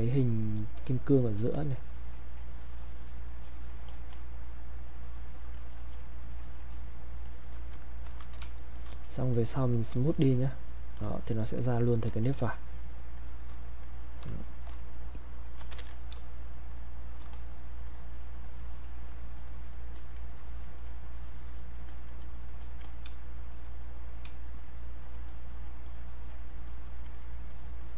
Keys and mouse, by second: 0.8 space, 1.2 click, 1.3 space, 1.8 alt+click, 2.6-5.5 drag, 5.5 click, 6.2 click, 7.3 alt+click, 8.4 space, 8.7 click, 9.0 shift+click, 10.1-12.2 shift+drag, 12.2 shift+click, 14.1 click, 15.4-16.7 typing, 16.5 click, 17.3 click, 20.4 alt+click, 21.0 click, 22.6 alt+click, 23.1 space, 23.5 click, 24.5 space, 24.6 click, 24.7 space, 25.2-26.7 drag, 26.7 alt+click.